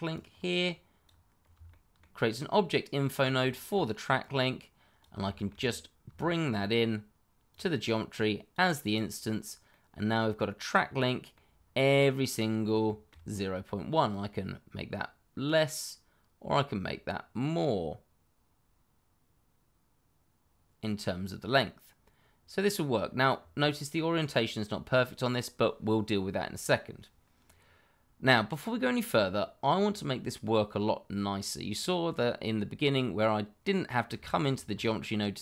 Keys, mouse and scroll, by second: 1.6 shift+middle click, 1.7 middle click, 1.8 shift+middle click, 2.4-3.1 scroll up 1, 3.1 scroll down 1, 3.5 shift+middle click, 4.2 click, 5.2 shift+middle click, 5.3 middle click, 5.5 scroll up 1, 6.1 shift+middle click, 6.2 middle click, 6.3 shift+middle click, 7.5 click, 9.7 middle click, 12.5 scroll down 1, 12.8 shift+middle click, 13.2 scroll up 1, 14.0 click, 18.2 click, 23.4 click, 23.6 middle click, 27.3-28.5 scroll down 1, 33.9 scroll down 1, 34.2 shift+middle click, 34.6-35.4 scroll up 1.